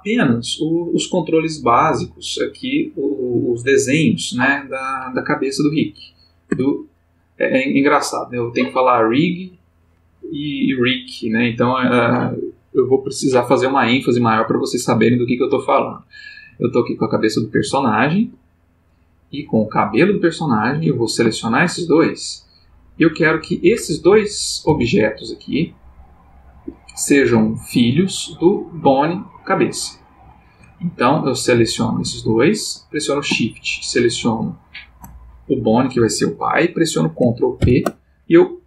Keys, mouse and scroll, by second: 6.5 Tab, 8.3 click, 17.6 g, 19.3 click, 20.0 g, 20.7 Escape, 21.4 shift+click, 23.0 click, 23.9 shift+click, 24.7 g, 26.5 Escape, 29.2 shift+click, 31.3 click, 32.3 shift+click, 34.4 shift+click, 37.6 ctrl+p.